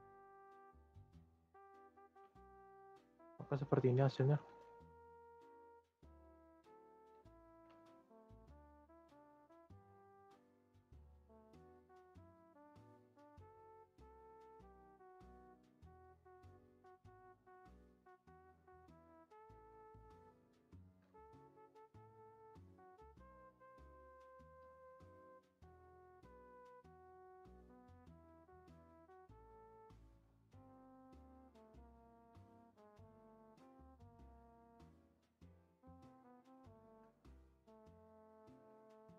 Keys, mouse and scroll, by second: 4.0 click, 4.4 space, 7.3 r, 8.9-9.3 drag, 9.3 space, 11.6-12.1 middle drag, 12.1 Tab, 12.3-12.6 scroll down 3, 12.6 middle click, 12.9 Tab, 13.0-13.4 scroll up 1, 13.4-14.3 drag, 14.3 scroll up 1, 14.3-15.7 middle drag, 15.7-19.0 drag, 19.0-19.7 shift+scroll up 2, 19.7-22.1 middle drag, 22.1 typing, 24.0-27.5 drag, 27.5-28.8 middle drag, 28.8-36.8 drag, 36.8 r.